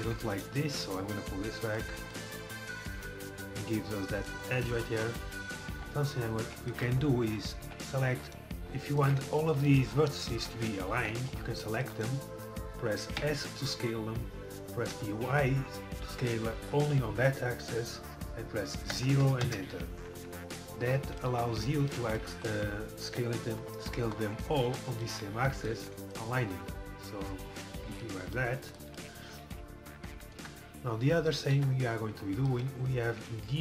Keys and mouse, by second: 1.1-2.2 middle drag, 2.2 click, 2.5-4.2 middle drag, 5.1-7.0 middle drag, 5.8 KP_3, 7.3 z, 7.7 c, 11.4 c, 12.1-14.0 right drag, 13.2 s, 20.3 middle click, 21.3 z, 22.2 middle click, 23.1 KP_7, 28.4 middle click, 30.0 KP_7, 30.0 KP_4, 30.4 KP_1, 31.6 KP_7.